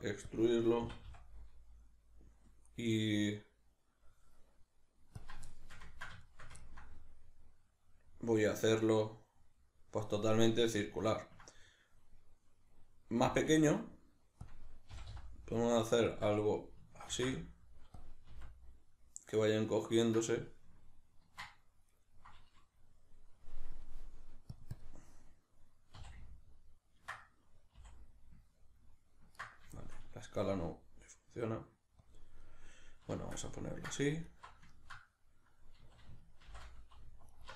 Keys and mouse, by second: 0.3 click, 0.8 e, 5.2 click, 5.5-14.5 shift+middle drag, 13.2 s, 14.5 click, 14.9 g, 16.2 click, 16.2-18.3 middle drag, 17.1 ctrl+r, 18.0 click, 18.3 s, 22.0-23.8 middle drag, 22.0 right click, 23.8-27.2 drag, 26.0 s, 27.2 middle click, 27.2 right click, 27.8 s, 29.5 right click, 29.8-32.1 shift+middle drag, 30.5 s, 32.1 click, 32.4-34.2 middle drag, 34.2 alt+right click, 34.7-37.3 ctrl+middle drag, 35.8 a, 36.5 shift+n, 37.3 alt+right click.